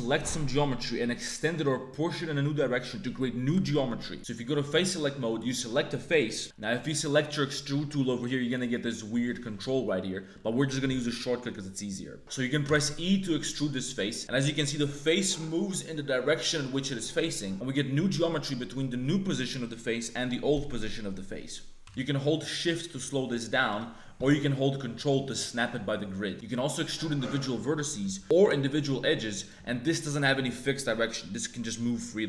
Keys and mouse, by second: 1.2 click, 4.7 click, 6.0 click, 12.6 e, 18.1 click, 21.8 e, 24.1 e, 26.3 ctrl+z, 26.3 a, 26.3 shift+w, 26.3 1, 26.4 e, 28.4 e, 28.4 2, 29.6 click.